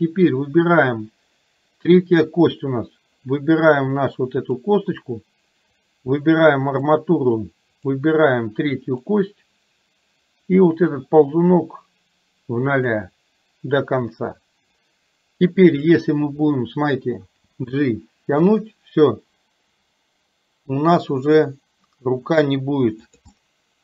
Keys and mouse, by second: 5.8-7.0 drag, 8.0-9.2 drag, 11.3-13.0 drag, 17.6 g, 23.3-23.8 middle drag.